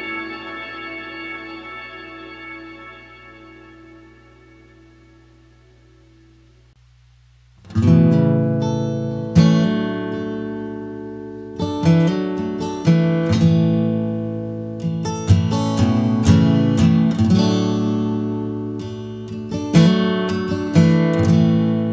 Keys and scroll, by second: 1.4 alt+space, 1.7 alt+space, 4.2 ctrl+alt+space, 4.5 ctrl+alt+space.